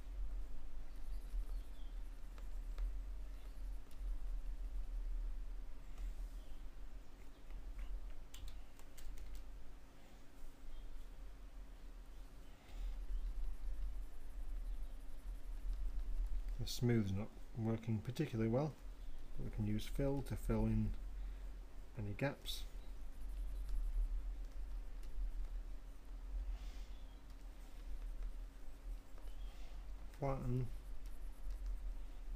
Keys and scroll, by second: 0.2 ], 5.5 ], 6.6 [, 8.3 2, 10.5 Return, 23.3 m.